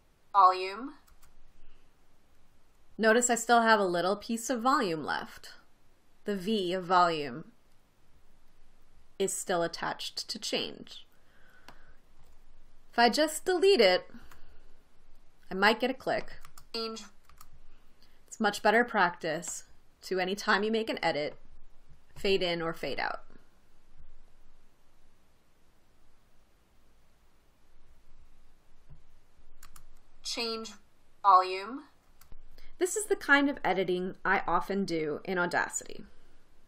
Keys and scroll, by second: 1.6 space, 14.7 BackSpace, 16.9 space, 17.8 space, 30.1 space.